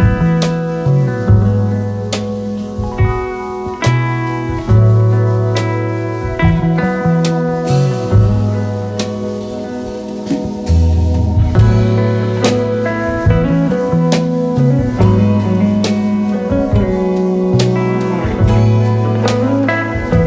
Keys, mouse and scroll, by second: 1.9-17.1 drag, 15.0-16.5 drag.